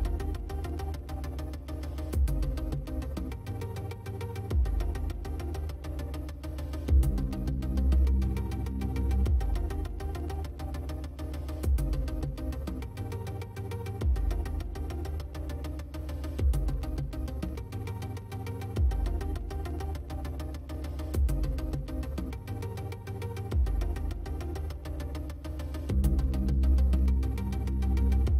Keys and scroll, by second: 5.7 ctrl+space, 6.1 ctrl+space, 13.5 space, 20.3 space, 21.2 space, 22.1 space.